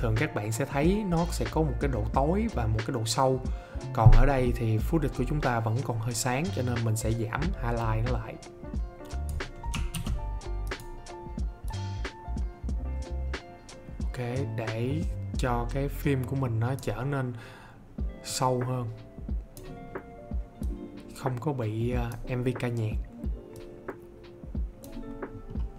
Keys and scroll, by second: 9.8 ctrl+z.